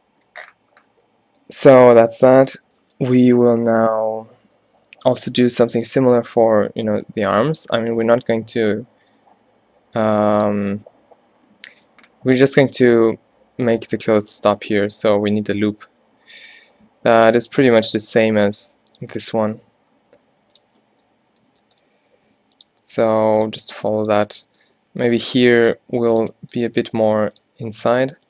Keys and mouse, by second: 0.8 middle click, 1.4 Tab, 8.1 right click, 9.0 shift+d, 16.0 g, 16.6 e, 17.7 e, 18.6 e, 20.1 e, 22.4 e, 23.2 e, 23.7 e, 24.8 g, 25.8 e, 27.0 g, 27.9 g.